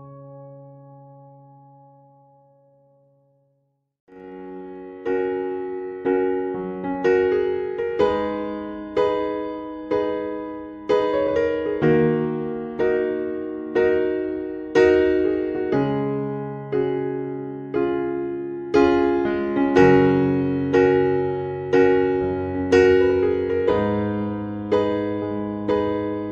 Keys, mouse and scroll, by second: 5.9 click, 6.6-7.1 scroll up 2, 7.1-7.7 scroll up 3, 7.7 click, 8.6-9.4 scroll up 4, 9.9 click, 10.9-11.4 scroll up 2, 11.4 scroll down 1, 11.6-11.9 scroll up 1, 12.1-12.5 scroll up 4, 13.2 click, 14.4-15.2 scroll up 3, 15.2-15.5 scroll up 2, 15.5 click, 17.7 right click.